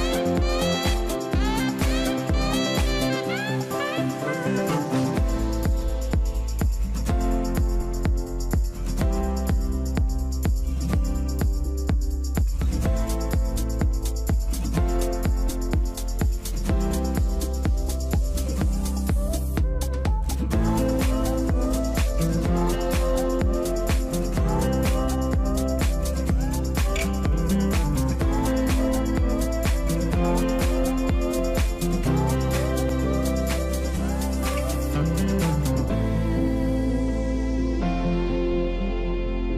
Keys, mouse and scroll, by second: 5.1 double click, 8.6 double click, 10.9 Delete, 11.1 Delete, 12.5 ctrl+click, 13.6 space, 14.1 Return, 15.3 shift+click, 15.9 right click, 18.4 double click, 26.7 double click.